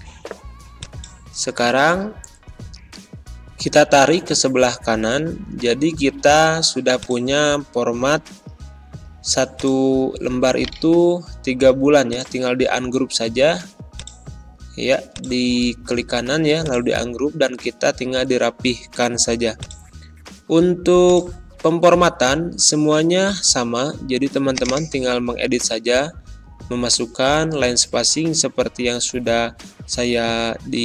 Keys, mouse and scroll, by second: 2.8 ctrl+shift+Num_Lock, 9.4 click, 10.5 right click, 12.0-18.8 drag, 19.5-26.1 drag, 26.1-29.8 typing.